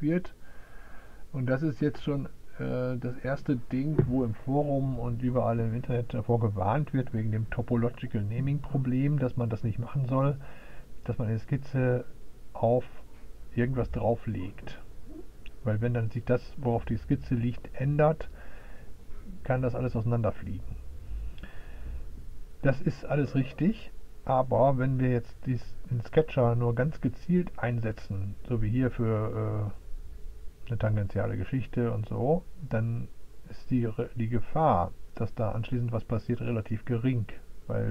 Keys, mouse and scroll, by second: 0.1 click, 1.5 click.